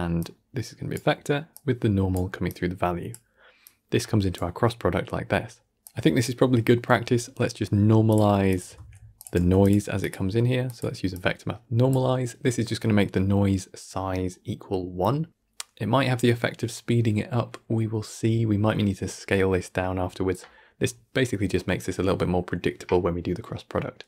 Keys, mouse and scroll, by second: 0.1-1.5 drag, 3.5 drag, 5.7 click, 6.6-8.0 middle drag, 8.0 click, 8.4 click, 8.6 shift+d, 9.3 g, 9.9-11.0 drag, 15.8-18.8 middle drag, 19.9-24.0 middle drag.